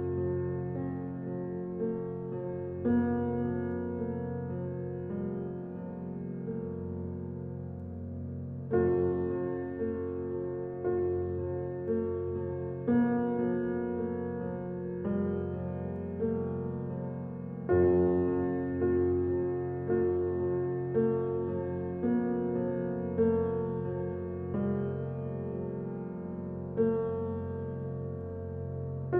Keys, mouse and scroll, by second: 3.1 scroll down 1, 3.6 Escape, 5.0 click, 9.0 ctrl+s, 9.9 F7, 11.2 alt+click, 11.6 right click, 11.9 alt+click, 12.2 alt+right click, 12.6 alt+middle click, 13.0 alt+click, 13.6 alt+right click, 13.8 alt+middle click, 14.3 alt+right click, 14.6-20.3 alt+drag, 20.3 alt+right click, 20.6 alt+middle click, 21.2-22.6 alt+drag, 22.6 alt+right click, 22.9 alt+click, 23.3 alt+middle click, 26.1 alt+Num_Lock, 26.3-29.1 alt+drag.